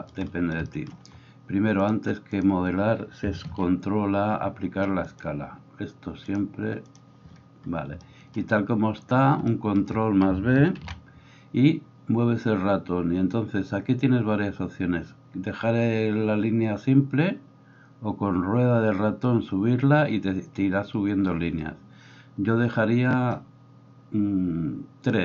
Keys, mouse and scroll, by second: 3.5 ctrl+a, 10.8 ctrl+b.